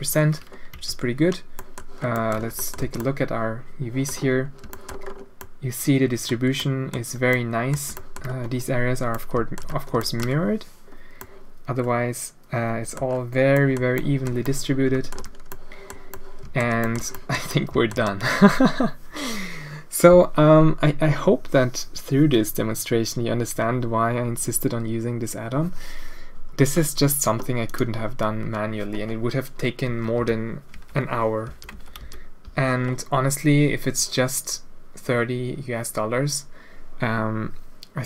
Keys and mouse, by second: 0.7 n, 1.6 click, 2.1 click, 2.3 Tab, 2.5 click, 2.8 alt+a, 2.9-3.3 drag, 3.3-4.0 middle drag, 4.7 shift+middle drag, 5.3-6.1 middle drag, 6.1 click, 6.5 click, 6.6 middle drag, 7.3 click, 7.3-7.7 middle drag, 7.9 shift+middle drag, 9.1-9.5 middle drag, 9.6 middle click, 10.0 shift+middle drag, 11.1-12.6 middle drag, 12.4 drag, 12.6 click, 12.7 middle click, 12.8 click, 13.5 middle drag, 13.9 drag, 14.4-15.1 middle drag, 15.5-15.8 middle drag, 16.1-16.6 middle drag, 16.8 shift+middle drag, 17.1 drag, 17.4-17.9 middle drag, 27.6 click, 29.8 Tab, 30.1 a, 30.7 Tab, 31.4 a, 31.7 Tab, 32.0 a.